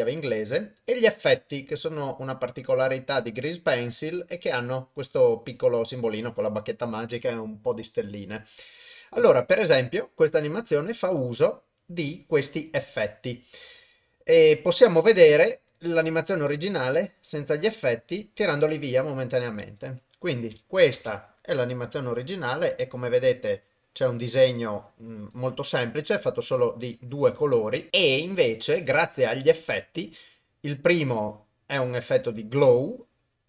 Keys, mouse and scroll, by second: 1.2 click, 15.7 click, 17.0 click, 18.4 click, 20.9 shift+space, 22.3-25.3 drag, 27.1 click, 28.9 click, 32.5 click.